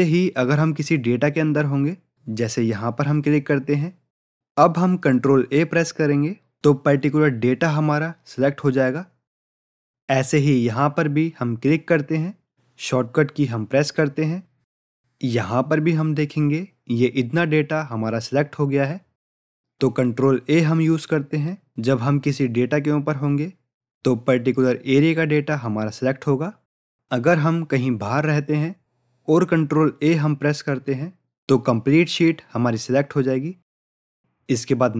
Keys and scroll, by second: 6.4 ctrl+a, 14.5 ctrl+a, 30.7 ctrl+a.